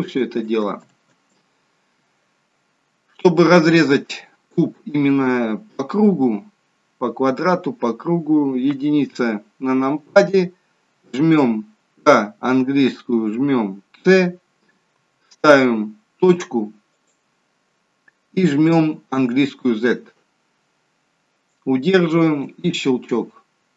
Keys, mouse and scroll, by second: 0.8 ctrl+z, 2.8-3.4 scroll down 1, 3.4 middle click, 3.4 scroll down 1, 8.6 KP_1, 12.0 k.